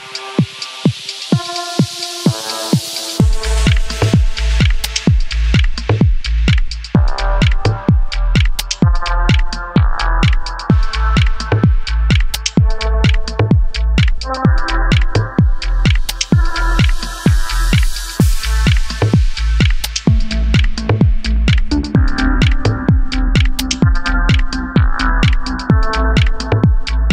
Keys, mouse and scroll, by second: 0.8-2.1 right drag, 1.8 Tab, 2.3 click, 3.4 h, 3.7 click, 4.8 Tab, 5.1 click, 5.9 a, 6.5 e, 9.8 click, 10.0 scroll down 1, 10.2 middle click, 10.6 Tab, 10.9 click, 11.0-18.0 middle drag, 16.6-16.9 scroll down 1, 16.9-18.0 scroll up 1, 22.8 middle click, 24.8-25.8 middle drag, 25.5 scroll up 2, 25.8 click, 26.2 Tab, 26.7 click.